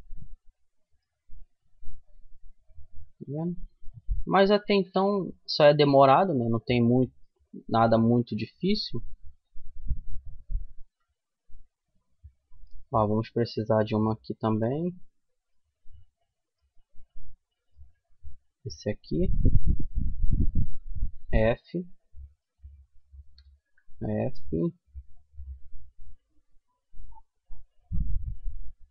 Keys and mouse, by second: 0.2-1.3 right drag, 1.3 f, 1.5-4.5 middle drag, 4.5-6.0 right drag, 5.6 f, 6.0-7.1 middle drag, 7.1 middle click, 8.8-10.9 drag, 10.2 f, 10.9 middle click, 12.9-14.8 middle drag, 15.1 middle click, 16.7-18.0 middle drag, 18.0-19.7 drag, 19.7 middle click, 20.4 f, 21.6-23.9 right drag, 23.0 f, 23.9 middle click, 25.6-28.5 middle drag.